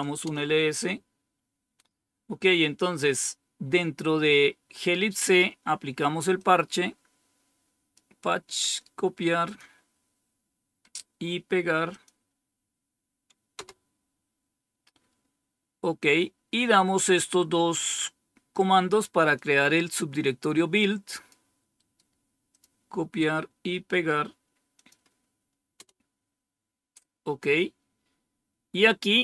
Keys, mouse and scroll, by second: 0.0-0.6 typing, 6.3-7.9 drag, 8.6 right click, 9.4 click, 11.8 click, 13.4 Return, 17.1-17.9 scroll down 1, 17.9-19.2 scroll down 1, 19.2-21.2 drag, 21.7 right click, 22.4 click, 24.7 click, 25.7 Return, 28.7-29.2 scroll down 1.